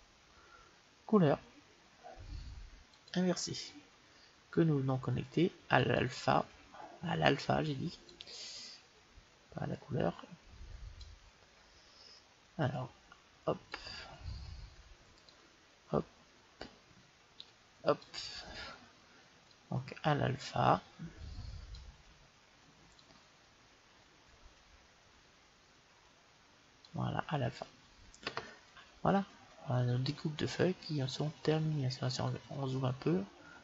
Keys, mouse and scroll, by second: 8.4-10.2 drag, 12.8-14.4 drag, 15.3-17.1 drag, 19.8-21.9 drag, 23.2-25.2 drag, 31.1 scroll up 1, 31.4 middle click.